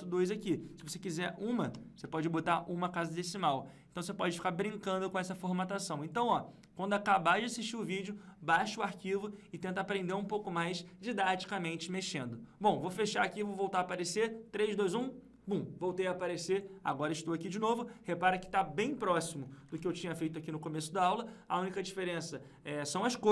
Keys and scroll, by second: 19.6 ctrl+Page_Up.